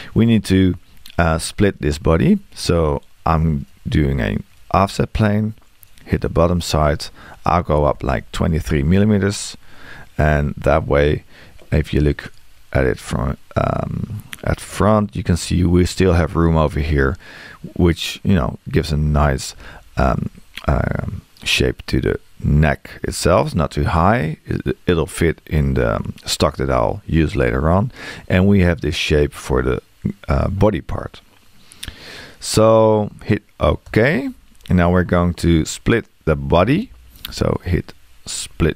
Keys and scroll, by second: 7.7 space.